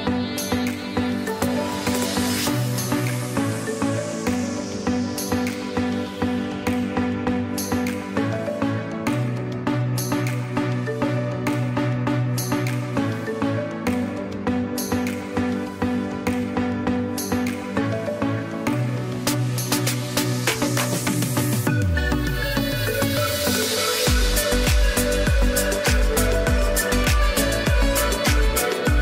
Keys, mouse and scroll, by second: 0.6 z, 1.0 click, 2.1 space, 2.4 click, 2.8 space, 3.3 click, 3.9 space, 4.2 click, 4.6 space, 5.0 click, 5.4 space, 5.6 click, 6.1 space, 7.9 click, 8.5 space, 8.8 click, 9.2 space, 13.1 click, 14.5 ctrl+j, 15.4 ctrl+shift+a, 24.0 click, 27.6 ctrl+Num_Lock, 27.6 click.